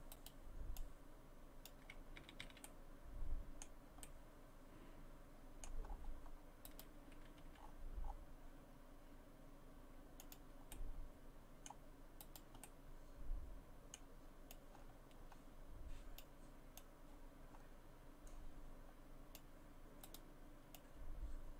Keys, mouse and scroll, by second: 0.1 right click, 0.8 click, 1.9 scroll down 2, 2.2 a, 2.4 a, 2.6 middle click, 4.0 middle click, 5.8-6.7 scroll up 5, 6.7 right click, 7.4 g, 10.7 middle click, 12.2 right click, 12.6 middle click, 14.5 click, 16.8 click, 20.1 right click, 20.8 click.